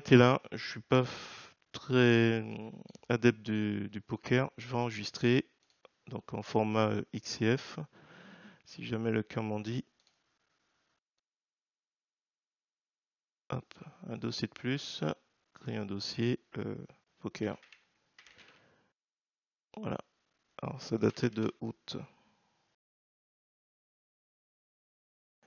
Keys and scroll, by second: 20.9 space, 21.3 space, 22.5-25.4 typing.